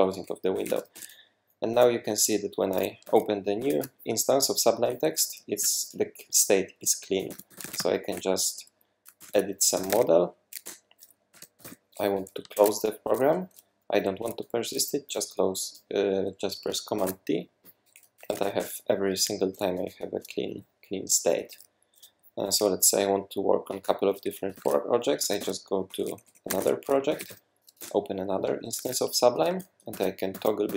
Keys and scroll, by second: 0.3-1.3 typing, 2.7 alt+super+2, 3.0 super+`, 3.6 super+`, 7.2-8.3 typing, 9.2 super+p, 9.5-12.3 typing, 10.6 Return, 12.5 super+q, 17.0 super+d, 17.8 super+d, 17.9-19.0 typing, 24.5 super+t, 25.2-28.8 typing, 27.8 Return, 29.4 super+`, 29.9 super+`, 30.3 super+`.